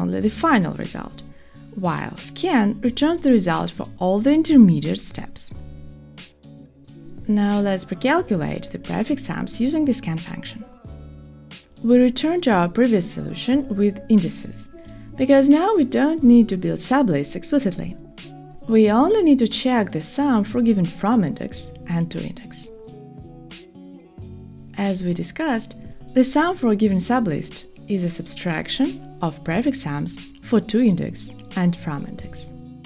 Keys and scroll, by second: 18.6 shift+super+Return, 19.6 super+v.